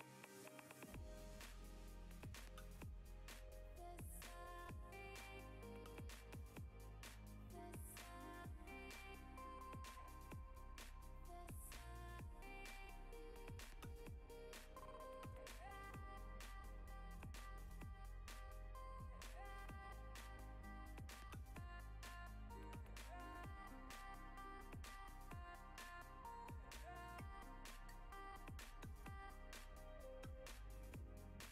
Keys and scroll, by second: 15.0 s, 19.5 s.